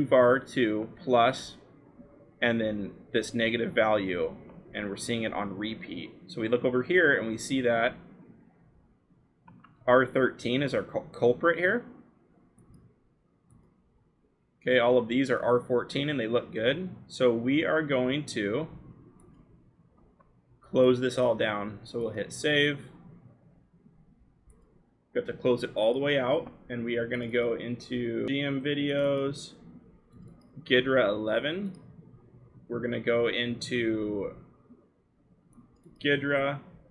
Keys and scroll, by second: 1.7-3.7 scroll, 16.7-18.8 scroll.